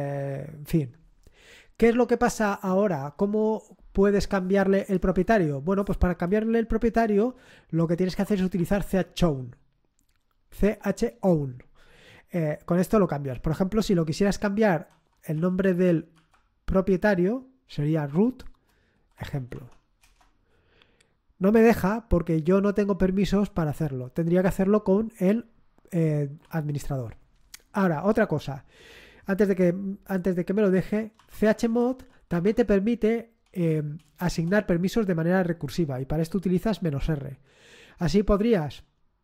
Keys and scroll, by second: 7.8-9.3 typing, 13.3 space, 15.1-16.2 typing, 18.5-19.8 typing, 20.0 Return, 30.9-34.2 typing.